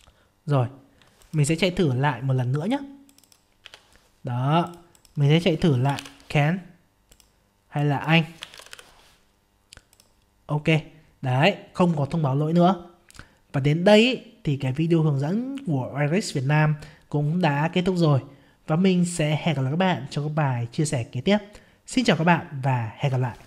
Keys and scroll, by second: 3.6 F5.